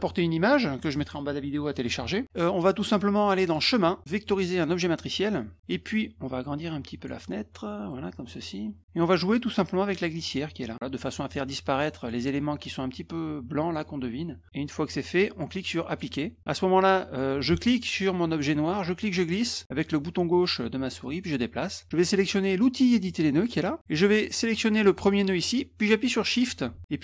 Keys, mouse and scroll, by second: 3.4 click, 4.6 click, 6.5 click, 7.3 middle click, 9.4-11.0 drag, 11.1 click, 11.8 click, 12.9 click, 14.4 click, 15.9 click, 16.4 click, 17.5 ctrl+z, 17.9 click, 18.7-21.6 drag, 23.4 click, 24.0-25.1 drag.